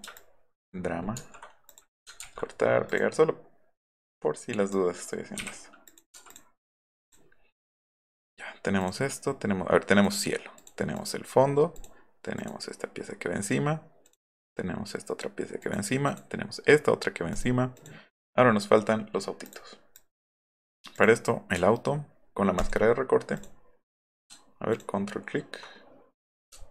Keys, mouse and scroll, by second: 0.2 ctrl+click, 1.2 ctrl+x, 1.7 click, 2.9 click, 3.9 click, 5.9 click, 6.3 click, 7.0 click, 8.8 click, 12.3 click, 14.0 click, 14.4 click, 15.6 click, 16.0 click, 17.3 click, 17.7 click, 19.4 click, 20.0 click, 22.6 ctrl+click, 23.4 ctrl+click, 24.7 ctrl+click, 26.6-26.7 alt+scroll up 6.